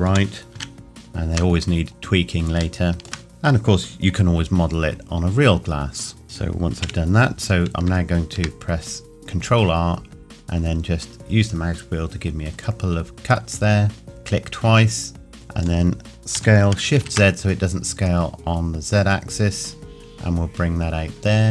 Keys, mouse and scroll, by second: 0.1 g, 1.0 shift+middle click, 1.5-2.6 scroll down 2, 2.8 shift+middle click, 3.3 click, 6.2 middle click, 6.9 KP_1, 10.3-12.2 scroll up 2, 14.0 click, 15.3 middle click, 16.4 s, 17.0 shift+z.